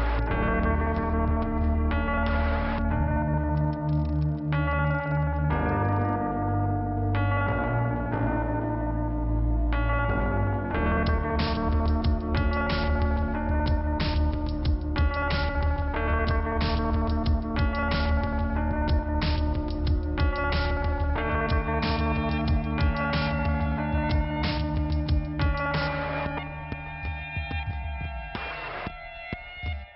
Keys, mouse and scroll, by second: 0.8 scroll down 1, 1.3 click, 3.2 click, 4.5 scroll down 1, 5.8 scroll down 1, 7.8 scroll up 1, 8.0 click, 8.2 click, 15.8 click, 18.7 click, 19.8 click, 20.2 click, 21.3 scroll up 1, 22.2 click, 22.6 click, 23.8-24.3 scroll down 1, 25.2 click, 26.0 click, 27.4 click, 28.6 click, 29.1 click.